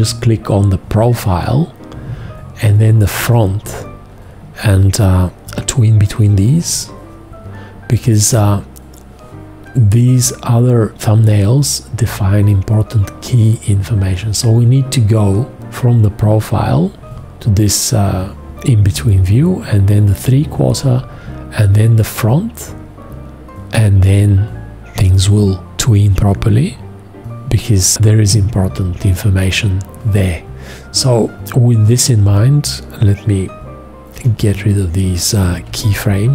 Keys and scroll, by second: 35.7 shift+x.